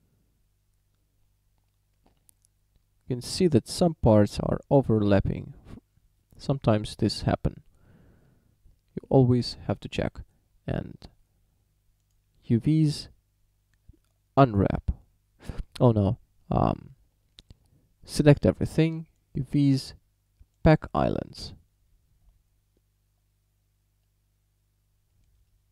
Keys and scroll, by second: 18.2 a.